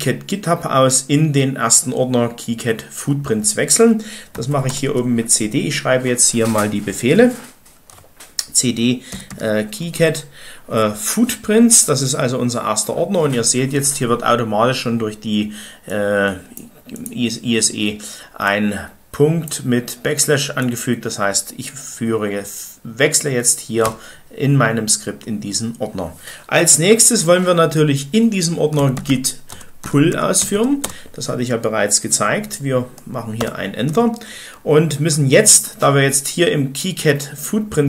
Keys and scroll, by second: 4.2-5.0 typing, 8.8-10.3 typing, 23.8 Return, 28.5-31.0 typing, 33.4 Return.